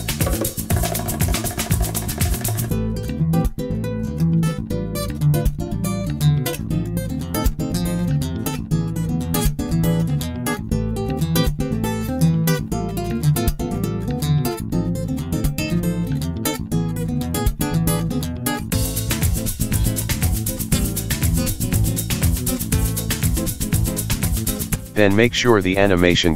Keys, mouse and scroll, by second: 0.5 shift+d, 1.5 r, 2.7 click, 4.4 click, 5.3 click, 6.4 click, 7.0 click, 7.2-7.9 scroll down 19, 7.9 click, 9.2 click, 10.0 click, 10.3 click, 11.0 right click, 12.0 click, 12.4 click, 12.8 right click, 14.1 shift+d, 16.4 click, 17.2 click, 17.8 right click, 19.0 click, 19.2 ctrl+z, 19.4 click, 19.8 right click, 20.7 shift+d, 21.9 click, 22.3 space, 24.1 space, 25.0 click.